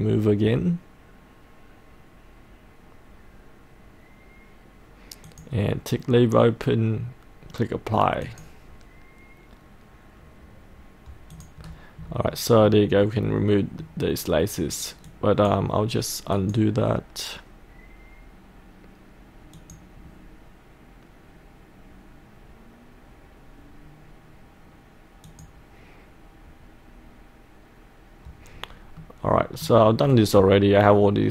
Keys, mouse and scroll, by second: 11.7-12.4 scroll up 1, 12.4 middle click, 13.0 scroll up 1, 13.3 middle click, 13.6-14.6 scroll down 1, 14.6-15.1 scroll down 1, 15.1 click, 18.3-20.8 drag, 28.8 scroll up 1, 29.0 middle click, 30.1-31.3 scroll down 1.